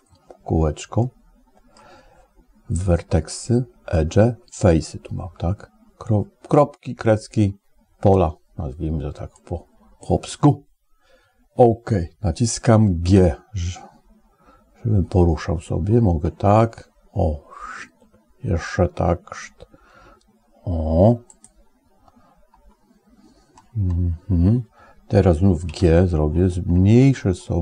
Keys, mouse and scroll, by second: 0.8 middle click, 9.2 click, 12.9 g, 25.5 g.